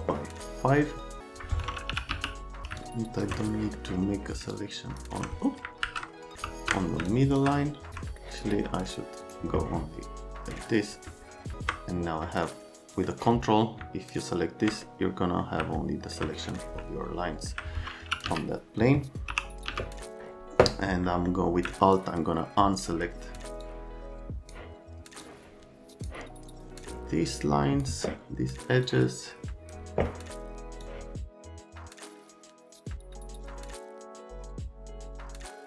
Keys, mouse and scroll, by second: 1.6-2.6 typing, 2.8 alt+click, 3.6 middle click, 4.5 alt+click, 6.4 ctrl+z, 7.1 alt+click, 8.2 middle click, 9.2 click, 12.3 right click, 15.0 right click, 15.8 alt+right click, 16.3 right click, 16.8 alt+right click, 17.8-19.7 typing, 21.1 middle click, 22.0 alt+middle click, 23.7 alt+middle click, 25.2 alt+middle click, 26.8 alt+middle click, 28.8 alt+middle click, 30.8 alt+middle click, 31.5 alt+middle click, 32.0 alt+middle click, 32.5 alt+middle click, 33.1 right click, 33.4 alt+right click, 34.1 alt+middle click, 34.6 alt+right click, 34.8 alt+right click, 35.2 alt+click.